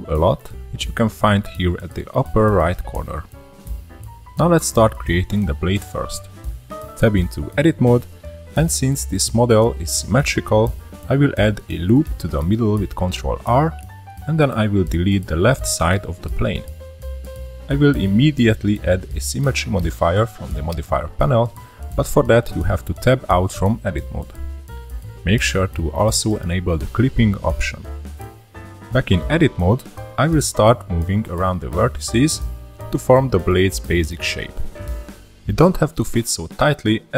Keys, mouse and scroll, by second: 1.6-4.6 drag, 5.0-7.6 middle drag, 7.6 click, 8.8-9.1 middle drag, 9.1 Tab, 10.1 ctrl+r, 12.4 3, 12.7 click, 13.3 x, 16.6 Tab, 18.8 click, 20.5 click, 23.3 click, 24.5 click, 26.2-27.0 middle drag, 27.0 scroll up 1, 27.8 Tab, 28.9 1, 29.0 click, 29.6 click, 30.3 middle click, 30.9-31.8 drag, 31.8-32.2 middle drag, 32.2 2, 32.3 click, 32.7 drag, 34.2 middle drag, 34.4 scroll up 6, 34.6 middle drag, 34.9 1, 35.0 click, 35.5-35.9 drag, 36.3 scroll down 1, 36.5 middle click, 37.1 scroll down 1.